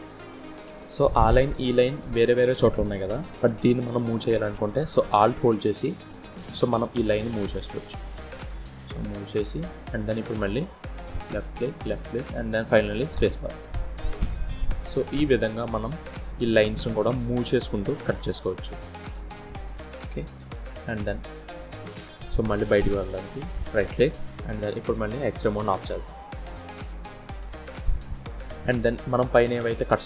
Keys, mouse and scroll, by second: 13.1 scroll down 3, 13.5 middle click, 18.1-19.8 scroll down 3, 23.2 click, 24.6 click, 25.0-25.3 scroll down 3, 25.3 middle click, 28.8-29.1 scroll down 1, 29.1 middle click.